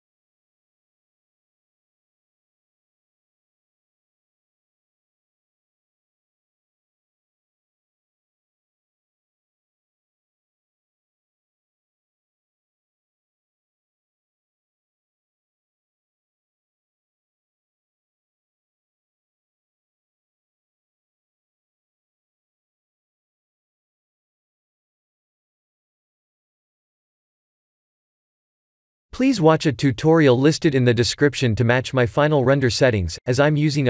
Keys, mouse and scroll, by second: 0.1 g, 2.6 shift+d, 6.7 shift+d, 10.4 click, 11.2 ctrl+z, 11.4 click, 11.8 middle click, 13.1 click, 13.5 middle click, 14.7 click, 14.8 click, 20.5 shift+middle click, 21.7 middle click, 23.4 shift+`.